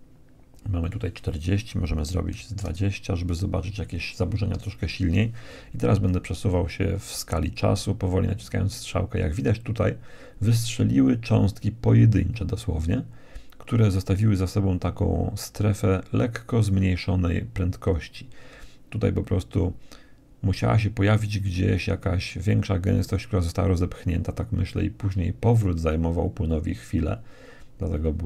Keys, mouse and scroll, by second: 4.8 Right, 5.4 Right, 5.9 Right, 6.6 Right, 7.0 Right, 26.0 Right.